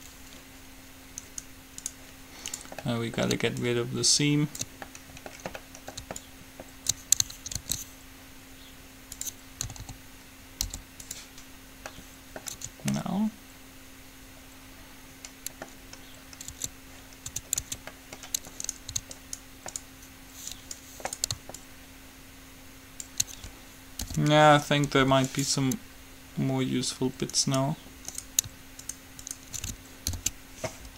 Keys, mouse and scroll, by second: 1.6-4.7 right drag, 3.1-4.5 middle drag, 3.8-5.6 drag, 5.6 middle click, 6.4-7.8 drag, 7.8 ctrl+e, 9.9 a, 10.1 a, 10.8 u, 12.1-13.3 middle drag, 12.8 Tab, 16.7 Tab, 17.6 Tab, 17.8 Tab, 18.8-20.1 middle drag, 20.1-22.6 right drag, 21.7-23.6 drag, 24.2 alt+p, 25.1 u, 27.6 click, 30.3 alt+p.